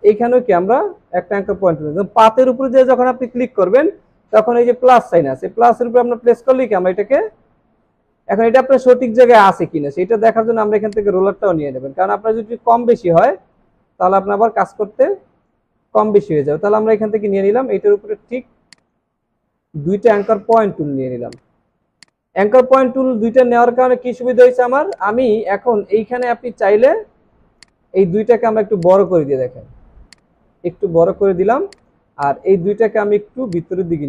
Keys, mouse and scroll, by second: 21.3 right click, 22.7 alt+scroll, 22.7 alt+scroll up 1, 24.5 alt+scroll down 1, 28.4 alt+scroll down 1, 28.8 space, 30.4-31.2 alt+scroll down 1, 32.3 double click.